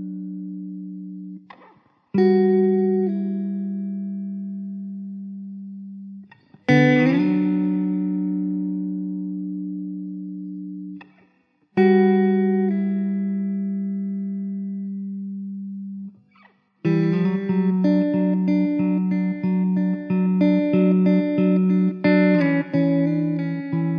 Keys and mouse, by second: 1.5 middle click, 5.1 alt+w, 6.1 middle click, 10.2 alt+w, 10.7 middle click, 12.1 s, 13.9 alt+w, 14.2 alt+middle click, 20.2 alt+w, 20.8 middle click, 21.7-22.1 typing, 23.7 Delete.